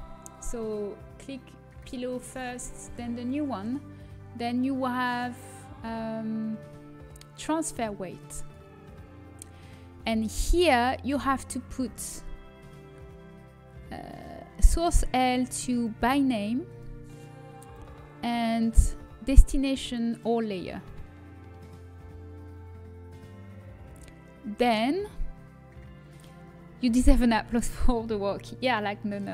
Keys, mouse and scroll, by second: 1.6-5.0 drag, 5.0-7.4 middle drag, 8.3-11.9 drag, 16.8-17.8 drag, 23.5-25.2 scroll down 1.